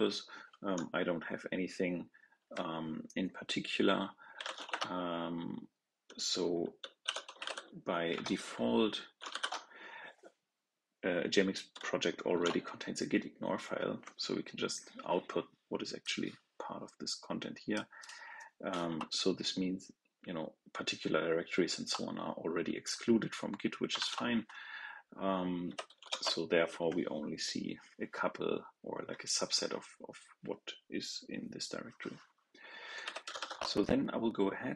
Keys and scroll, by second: 23.9 ctrl+l.